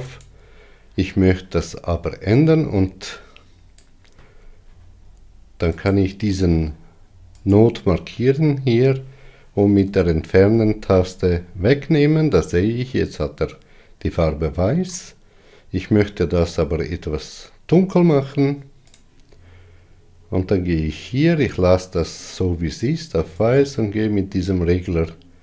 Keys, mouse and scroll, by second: 1.1 click, 6.8 click, 8.6 click, 10.7 Delete, 17.8-18.7 scroll up 3, 18.3-20.2 middle drag, 19.5 click.